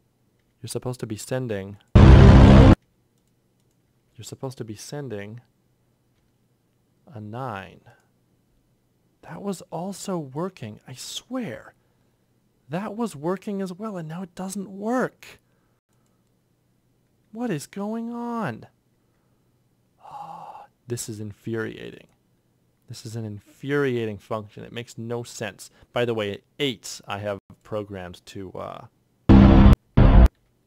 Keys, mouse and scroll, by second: 3.7 F8, 6.0 ctrl+F6, 9.9 typing, 18.3 ctrl+F6, 29.2 8, 29.7 8, 29.9 8.